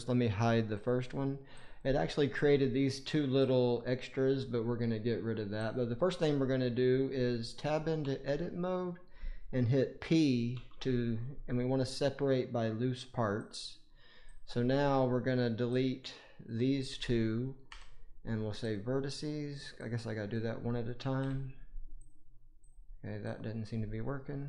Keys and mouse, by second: 0.6 click, 1.6 click, 1.9-2.5 middle drag, 3.5 click, 5.5 click, 6.0 click, 7.9 Tab, 10.4 p, 15.7 click, 17.6 Delete, 19.7 click, 21.1 Delete, 23.2 click, 24.3 Delete.